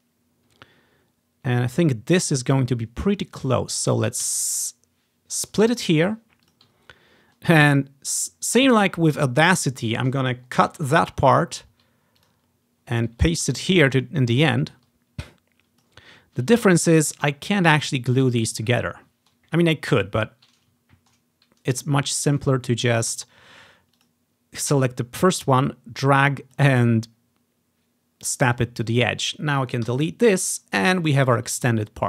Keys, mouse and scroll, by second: 2.3-3.6 drag, 4.4 s, 6.6 click, 6.9-7.2 ctrl+scroll down 1, 7.2 click, 8.0 click, 8.8-10.8 scroll down 1, 10.8 ctrl+x, 11.5 ctrl+scroll up 1, 12.3-14.0 drag, 13.6 ctrl+v, 14.2-14.8 ctrl+scroll up 1, 15.4 ctrl+click, 16.5 ctrl+click, 16.8-18.6 ctrl+scroll up 1, 19.1-20.1 ctrl+scroll down 1, 20.9-21.3 scroll down 1, 22.1-23.6 scroll up 1, 24.2-28.0 drag, 28.1 click, 28.7 click, 30.0 Delete, 30.4 click, 31.1-31.6 ctrl+scroll down 1, 31.5 ctrl+click.